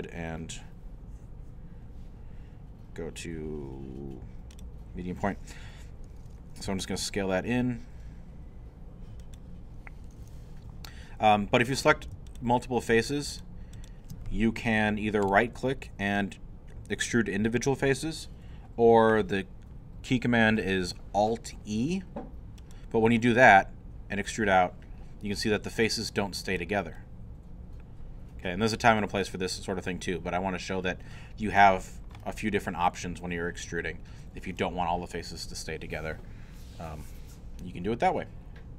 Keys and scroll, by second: 6.7 s.